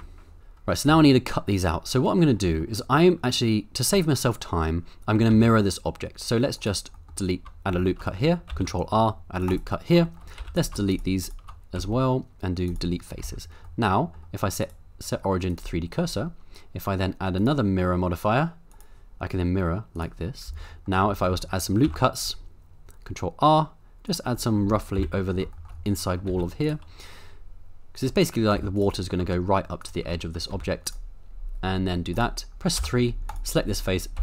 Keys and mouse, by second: 0.9 Tab, 2.5 middle click, 5.3 ctrl+r, 6.6 right click, 7.0 middle click, 7.7 shift+middle click, 8.5 ctrl+r, 9.5 right click, 10.1 shift+middle click, 10.4 3, 11.2 shift+click, 11.8 x, 13.2 Tab, 13.6-14.1 middle drag, 14.7-15.6 right drag, 17.4-18.8 drag, 19.9 click, 20.4 Tab, 20.7 middle click, 21.2 middle click, 21.8 ctrl+r, 24.0 click, 24.4 middle click, 24.9 KP_7, 25.6 shift+middle click, 26.3 ctrl+r, 27.9 click, 28.5 ctrl+r, 29.8 shift+click, 30.5 ctrl+r, 32.1 click, 32.8 3, 34.1 x.